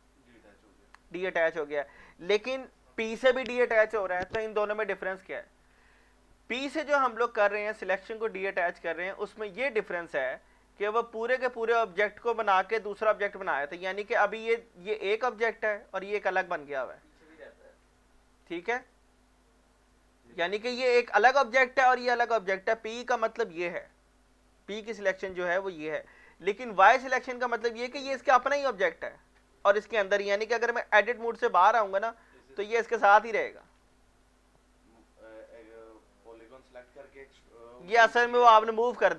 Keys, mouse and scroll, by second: 13.9-14.2 scroll down 1, 18.4 scroll down 1, 18.7 middle click, 18.8 scroll up 1, 20.3 middle click, 26.3 scroll up 1, 27.5 shift+middle click, 31.3 Tab, 31.5-32.2 scroll down 2, 32.2-32.7 scroll down 1, 32.7 click, 33.8 ctrl+z, 35.9-38.9 middle drag.